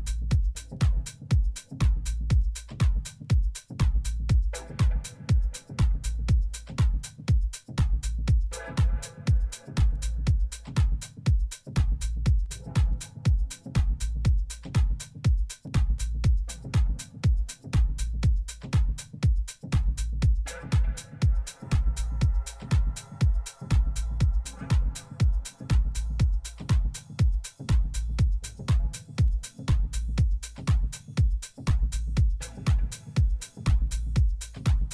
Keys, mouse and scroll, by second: 29.9-31.8 middle drag.